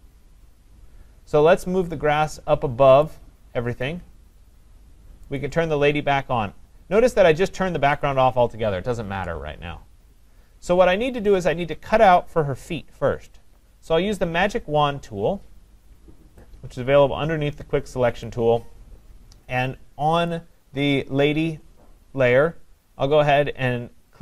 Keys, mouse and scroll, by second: 3.0 click, 5.4 click, 7.5 click, 8.0 click, 18.3 click, 20.3 click.